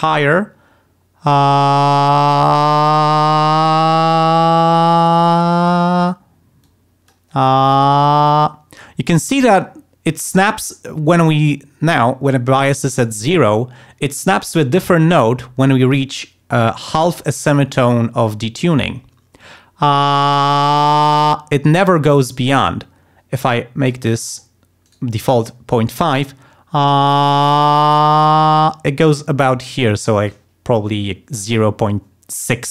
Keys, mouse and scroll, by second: 6.6 click, 12.3 click, 23.5 click, 24.1 click, 24.8 right click.